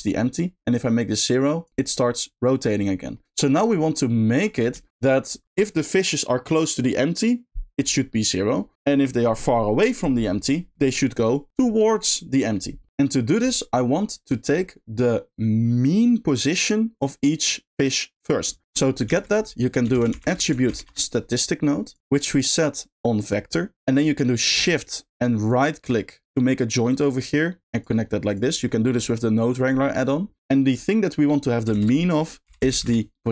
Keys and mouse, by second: 0.8 click, 1.8 middle click, 3.1 middle click, 3.7 middle click, 4.8 shift+middle click, 12.9 space, 18.2 middle click, 19.0 shift+a, 20.1 t, 22.5-23.3 drag, 25.4 shift+right click, 26.9-27.8 drag, 28.2 click, 28.6 middle click, 30.4 middle click, 31.7 shift+a.